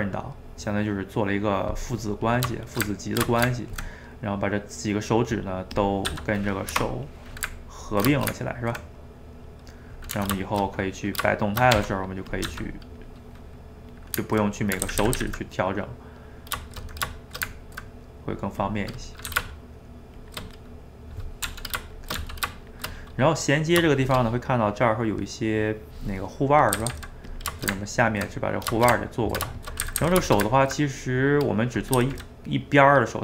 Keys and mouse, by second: 2.7 shift+right click, 2.9-5.9 ctrl+middle drag, 5.9 click, 6.1 g, 7.1-11.4 middle drag, 11.4 shift+right click, 11.8 r, 12.5 g, 13.4-14.9 middle drag, 14.9 ctrl+z, 15.1 ctrl+z, 15.6-17.2 middle drag, 17.2 shift+right click, 17.4-18.7 ctrl+middle drag, 18.7 click, 18.8 middle click, 19.3 g, 20.5 middle click, 21.4 r, 22.2 g, 23.1-26.8 middle drag, 26.8 a, 26.9 a, 27.3 click, 27.6-29.9 ctrl+shift+middle drag, 29.9 a, 30.0 a, 30.3-32.0 ctrl+shift+middle drag, 32.0 a, 32.2 a.